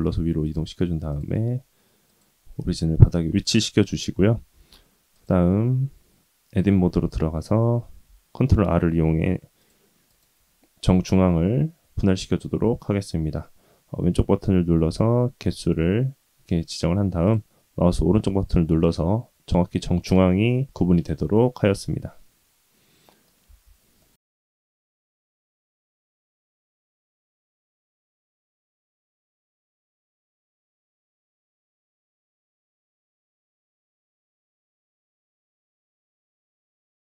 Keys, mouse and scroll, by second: 4.5 ctrl+r, 5.1 click, 5.7 Tab, 6.3 ctrl+r, 7.9 ctrl+r, 14.9 ctrl+z, 15.6 ctrl+r, 21.8-23.3 middle drag, 23.4 Tab, 24.0 middle click, 24.1 ctrl+z, 24.1 Tab, 24.9-25.6 middle drag, 26.3 s, 28.1 s, 29.0 s, 30.0 middle click, 30.5 s, 31.4 s, 32.6-33.0 middle drag, 33.2 middle drag, 33.6 s, 34.3 g, 35.1 middle click, 35.8 scroll up 2, 36.1 Tab.